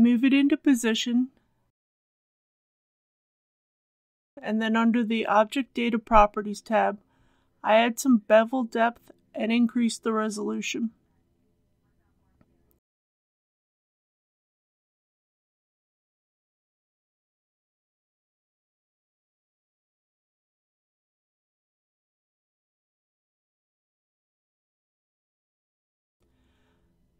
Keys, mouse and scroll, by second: 2.4 click, 3.0-3.4 scroll up 1, 5.6 click, 6.4-7.5 scroll down 1, 7.8 click, 8.3-9.1 scroll down 1, 12.1-18.1 drag, 18.8 KP_Decimal, 19.0 KP_1, 21.0 click, 21.7 KP_6, 24.3-26.2 middle drag, 26.2 Tab, 26.8 right click.